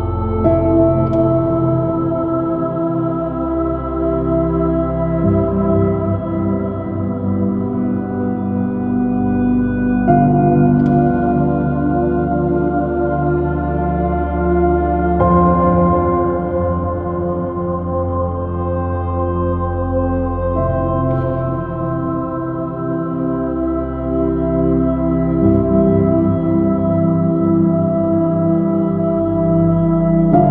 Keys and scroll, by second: 4.9 x, 9.6 ctrl+x, 10.8 x, 12.5 x, 23.0 space, 25.6 space, 26.7 super+-, 28.0 super+i, 29.3 space, 29.6 s.